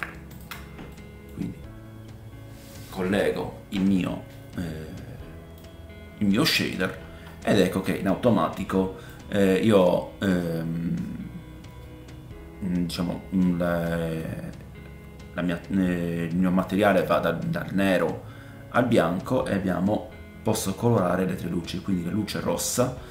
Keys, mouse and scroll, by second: 0.9 middle click, 1.6-9.8 drag, 1.6-2.3 scroll up 1, 5.5-22.7 middle drag, 5.5-9.8 right drag, 6.7-7.5 scroll up 1, 7.5 scroll up 5, 9.3 scroll up 1, 22.7-23.1 drag.